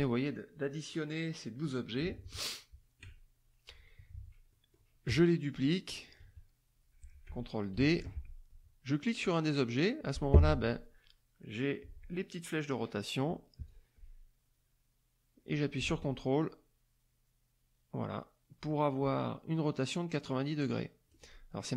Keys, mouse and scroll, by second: 1.9 click, 4.5 click, 5.1 KP_Add, 6.2 KP_Subtract, 7.7 ctrl+d, 9.6 click, 13.6-21.2 drag.